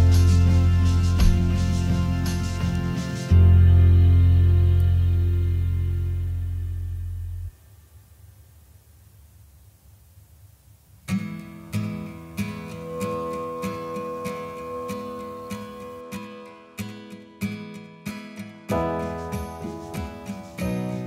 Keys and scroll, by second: 1.8 u, 3.1 u, 9.5 ctrl+8, 10.1 ctrl+shift+8, 11.4 ctrl+shift+8, 12.9 shift+i, 13.2 shift+n, 14.0 n, 15.7-16.8 typing.